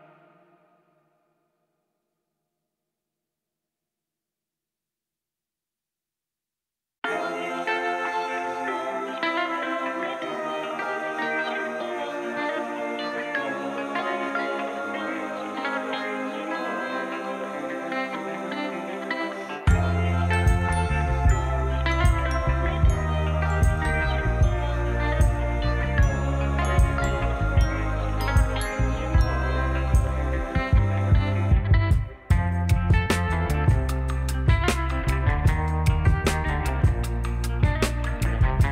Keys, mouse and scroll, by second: 0.0 click, 0.0-2.8 middle drag, 0.0-2.8 right drag, 2.8 click, 2.9 middle click, 2.9 right click, 5.3-6.3 middle drag, 5.3-6.3 right drag, 5.3 n, 8.5 click, 10.1 right click, 10.1 n, 15.4-23.5 right drag, 19.6 click, 19.6 middle click, 23.5-26.0 middle drag, 26.0-38.7 right drag, 33.3-35.2 shift+middle drag.